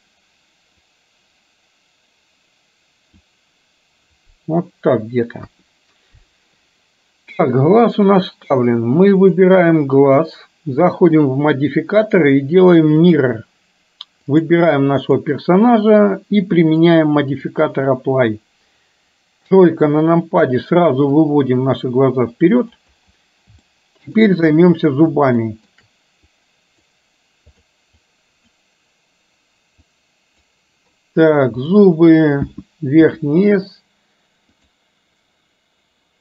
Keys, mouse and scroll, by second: 0.9 click, 1.3-3.4 drag, 5.5 KP_1, 7.8 click, 9.3 click, 11.3-13.3 drag, 14.4 click, 16.9 click, 19.5 KP_3, 21.3-22.8 drag, 23.7-24.2 shift+middle drag, 25.4 shift+middle drag, 26.5 click, 27.4 click, 28.0-28.5 drag, 29.9 click.